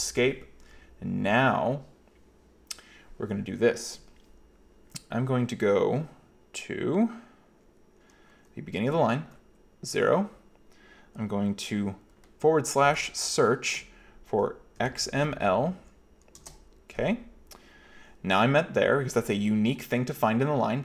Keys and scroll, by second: 9.3 0, 12.9 /, 14.8-15.8 typing, 16.5 Return.